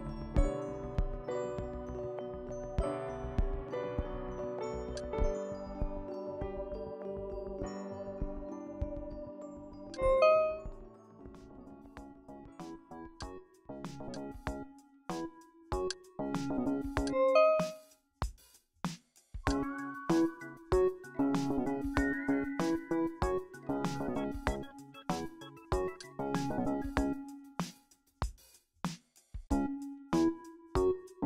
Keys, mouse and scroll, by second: 1.2 KP_3, 2.0 KP_0, 3.6 Return, 5.0-8.8 drag, 10.0-11.9 drag, 11.4 KP_8, 11.9 KP_0, 13.2-15.3 drag, 14.9 KP_8, 15.4 KP_0, 17.1-18.9 drag, 18.3 KP_1, 18.6 KP_0, 19.5-21.2 drag, 20.7 KP_1, 21.0 KP_0, 23.0 click, 26.0 click.